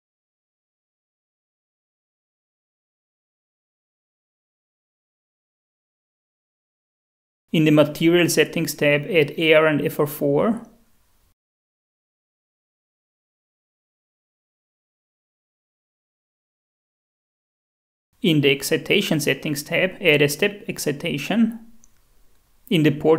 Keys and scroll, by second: 0.0-0.3 typing, 1.4 space, 3.8-4.8 typing, 10.1-11.0 typing, 13.7 f, 14.2 4, 15.6-16.5 typing, 19.2-20.5 typing.